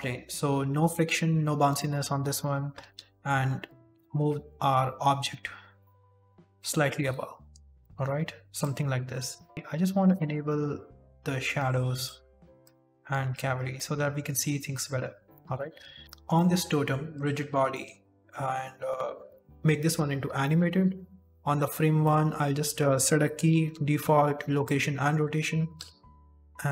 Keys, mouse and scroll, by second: 16.0 click, 16.3 middle click, 17.0 click, 17.7 middle click, 19.8 click, 20.4 shift+middle click, 20.5-21.1 scroll up 3, 21.6-21.9 scroll up 2, 21.9 middle click, 23.5 i, 25.2 scroll down 1, 25.7 KP_1, 26.2 shift+middle click, 26.6 KP_1.